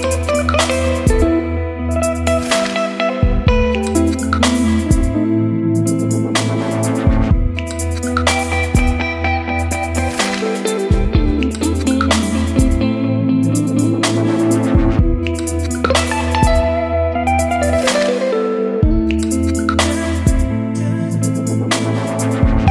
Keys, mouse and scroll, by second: 2.9 right click, 3.4-17.9 drag, 19.3-22.7 drag, 22.5-22.7 typing.